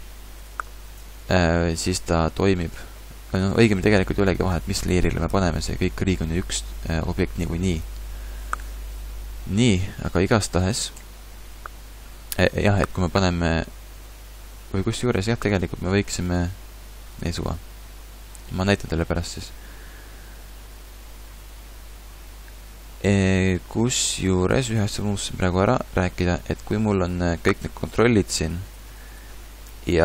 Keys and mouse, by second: 1.1 a, 10.2 KP_3, 11.0 KP_5, 11.5 KP_5, 19.0 middle click.